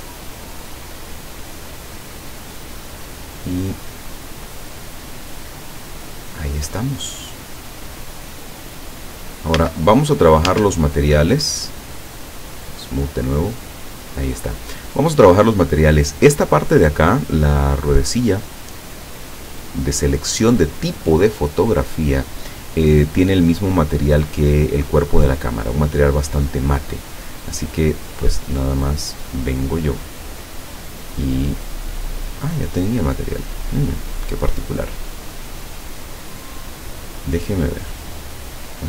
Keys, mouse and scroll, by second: 4.4-6.5 middle drag, 7.1-8.3 middle drag, 8.7-9.2 scroll up 2, 9.6 a, 10.5 Tab, 11.1-11.6 scroll down 1, 11.6-12.0 scroll up 1, 13.5 click, 16.0 right click, 19.4 click, 28.8 right click, 29.5 right click, 31.5 click, 32.5-32.9 scroll down 1, 33.4 right click, 34.2 right click, 35.1-35.6 scroll up 1, 37.8 click.